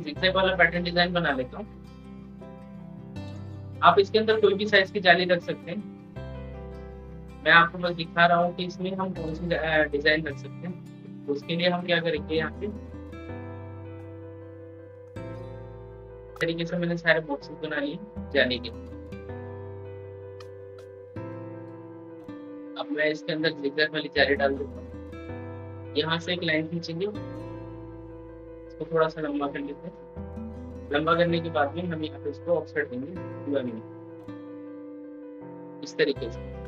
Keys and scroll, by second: 9.8 ctrl+z.